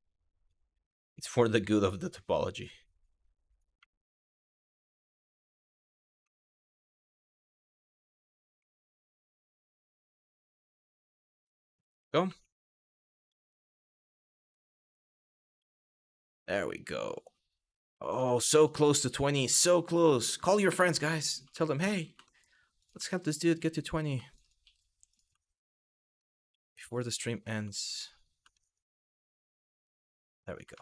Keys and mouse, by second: 0.9 click, 2.2 click, 2.3 e, 3.1 click, 3.5 shift+middle click, 5.5 click, 5.9 shift+middle click, 7.1 click, 7.2 e, 7.9 click, 8.3 shift+middle click, 9.6 click, 9.9 e, 11.0 click, 11.9 2, 12.4 click, 13.0 click, 13.3 f, 14.0 click, 14.5 shift+click, 15.2 f, 15.6 shift+middle click, 17.3 click, 18.4 shift+middle click, 19.1 click, 19.9 shift+click, 20.5 middle click, 21.0 click, 21.9 middle click, 22.4 click, 23.6 click, 26.6 click, 28.2 shift+middle click, 29.7 f, 30.4 shift+middle click.